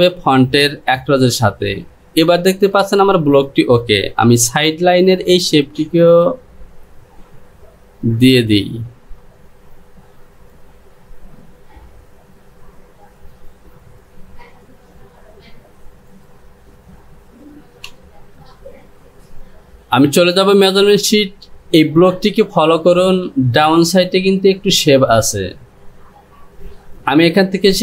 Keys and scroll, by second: 4.4 Return, 17.9 Home.